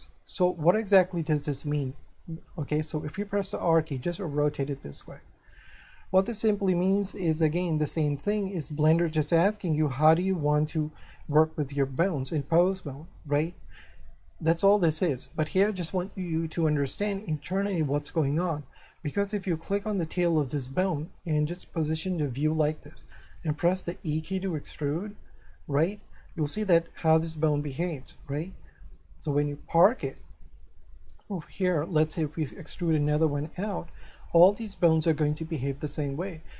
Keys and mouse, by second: 1.0 shift+middle click, 3.3 r, 5.6 click, 6.2 shift+middle click, 16.3 shift+middle click, 18.4 shift+middle click, 19.6 right click, 20.8 middle click, 22.3 middle click, 23.8 e, 29.7 click, 31.1 shift+middle click, 32.6 e, 33.7 click, 34.8 shift+middle click.